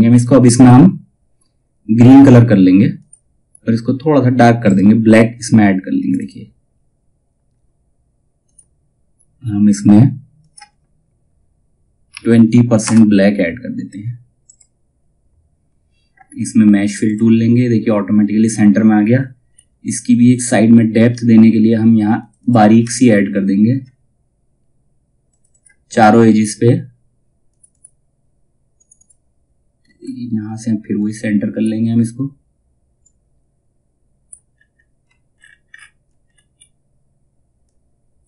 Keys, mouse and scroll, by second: 2.5 click, 4.1 right click, 5.5 click, 7.9 click, 14.0 click, 16.6 click, 19.0 scroll up 1, 21.7 click, 22.6-23.2 alt+scroll down 1, 24.8 click, 29.4 scroll up 1, 30.5-34.1 drag, 34.1 scroll down 1, 35.2 alt+scroll up 1, 35.3-35.7 alt+scroll down 1, 35.8-36.2 scroll up 1, 37.2-38.2 drag.